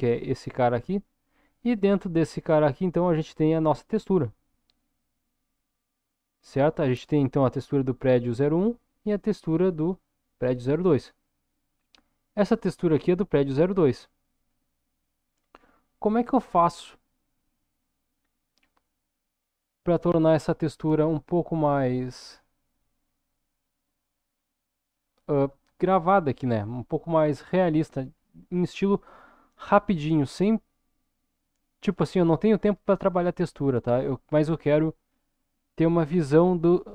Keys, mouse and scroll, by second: 7.7 click, 9.7 click, 16.5-17.0 scroll down 2, 17.0 middle click, 18.1-18.7 scroll up 3, 20.2-21.5 drag, 22.1 click, 22.6-25.1 drag, 27.1-28.5 scroll up 1, 28.7-29.9 shift+middle drag, 31.2-32.4 middle drag, 32.5-33.5 middle drag.